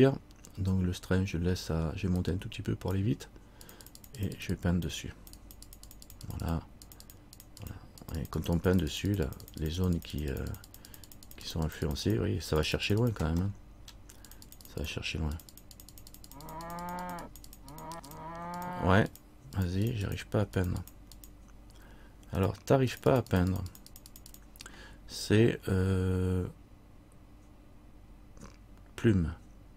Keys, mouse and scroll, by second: 2.3-13.5 click, 13.6-14.4 scroll up 1, 14.4 click, 14.4 middle click, 17.0-27.9 click.